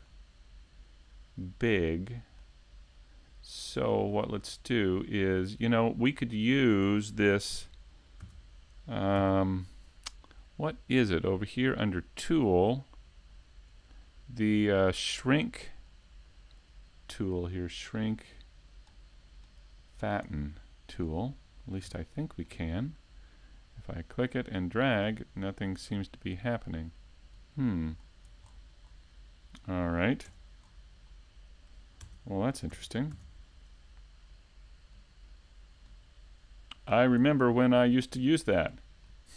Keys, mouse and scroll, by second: 0.5 click, 1.7 KP_Decimal, 2.0 middle click, 2.4 Tab, 2.8-3.1 scroll down 3, 3.1 middle click, 4.3 right click, 4.6 shift+right click, 5.2 right click, 5.7 middle click, 7.7 e, 9.2 click, 10.2 e, 11.3 right click, 11.9 z, 14.4 s, 16.7 click, 18.2 ctrl+r, 20.5 click, 21.0 ctrl+Tab, 21.6 right click, 21.9 middle click, 22.8 shift+right click, 23.2 middle click, 24.6 e, 26.4 click, 26.9 s, 29.1 click, 29.3-29.9 scroll down 3, 29.6 middle click, 30.3 Tab, 30.6-31.1 scroll up 3, 31.6 right click, 32.8 Tab, 33.0 right click, 33.2 Tab, 35.0 ctrl+Tab, 36.0 alt+right click, 36.4 middle click, 37.7 alt+shift+right click, 38.1 middle click.